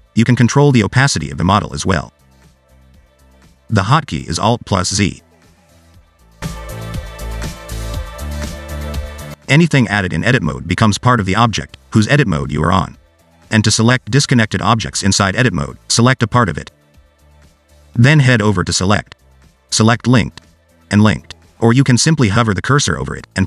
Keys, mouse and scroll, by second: 5.4 alt+z, 9.9 shift+a, 11.2 g, 12.7 Tab, 13.3 g, 14.7 Tab, 15.9 click, 17.3 click, 19.6 click, 22.7 click.